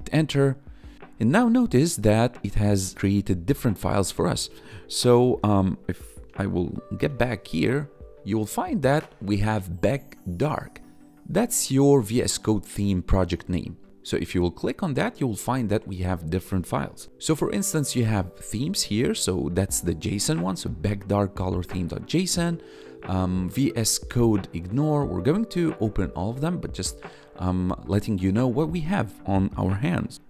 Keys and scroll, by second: 6.2 ctrl+`, 6.9 ctrl+b, 8.9 1, 13.4 1, 14.6 1, 30.1 ctrl+`.